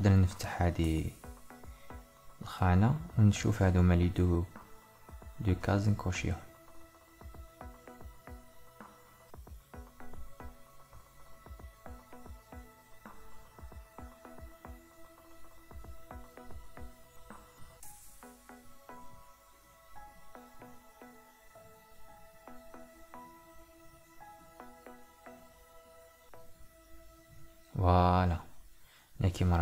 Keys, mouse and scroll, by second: 0.3-26.9 drag.